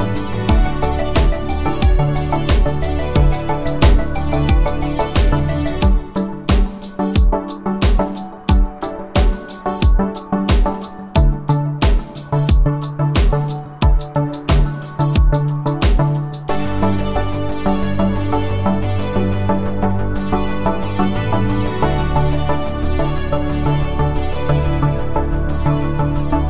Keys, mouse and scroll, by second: 1.9-3.7 scroll, 3.9-5.8 click, 11.0 ctrl+alt+click, 13.2-14.5 click, 16.1 ctrl+alt+click, 18.2-19.0 space, 19.9-20.5 click, 20.6 space, 20.9 click, 21.1-21.6 space, 22.7 ctrl+alt+click, 26.1-26.4 scroll up 1.